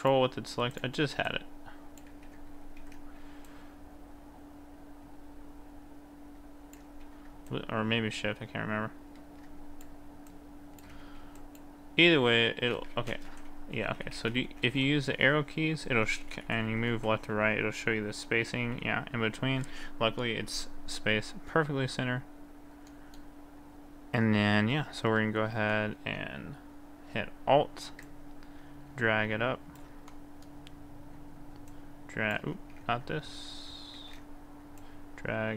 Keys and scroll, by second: 2.2 ctrl+z, 2.7 ctrl+z, 7.0 ctrl+z, 11.1 ctrl+z, 13.3 Right, 13.8 Right, 14.2 Right, 14.5 Right, 15.9 t, 16.0 Right, 16.5 Right, 17.0 Right, 18.6 Right, 19.6 t, 32.7 ctrl+z, 34.0 ctrl+z.